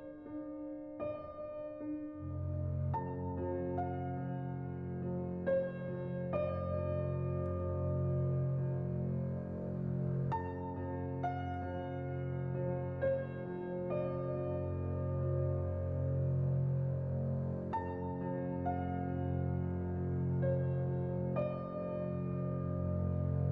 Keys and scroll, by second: 3.1 z, 11.3-13.0 typing, 14.4 Tab, 15.7-16.5 typing, 18.4-19.1 typing.